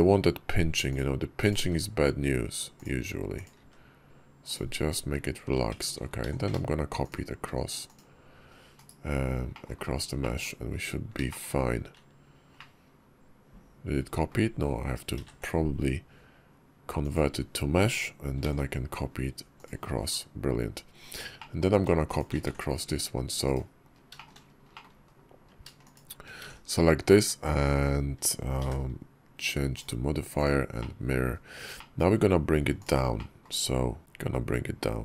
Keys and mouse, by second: 1.3 click, 1.4 g, 3.2 click, 3.4 g, 5.5 Tab, 6.2 alt+x, 7.7 click, 9.1 /, 9.4 middle click, 10.0 middle click, 11.1 shift+middle click, 12.4-14.2 middle drag, 15.0 ctrl+a, 18.3 alt+x, 19.5 click, 21.3 click, 22.0-23.4 alt+shift+drag, 24.0 shift+click, 24.6 middle click, 24.9 KP_5, 25.7 shift+click, 26.3 alt+x, 30.2-30.6 drag, 30.6-31.0 middle drag, 31.6 middle drag, 32.6 click, 33.0 middle click, 34.0 g.